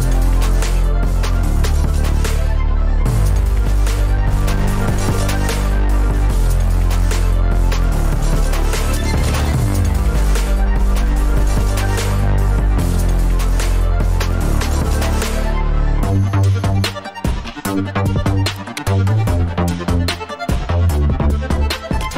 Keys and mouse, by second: 14.9 Tab, 15.9-16.6 middle drag, 16.9 Tab, 17.2 middle click, 17.8 k.